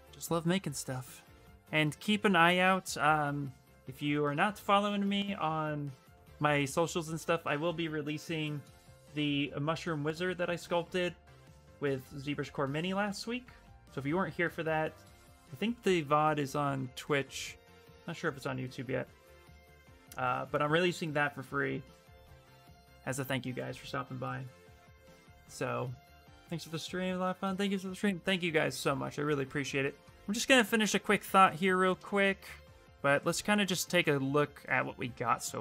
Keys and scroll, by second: 5.7 ctrl+v, 6.9 Return.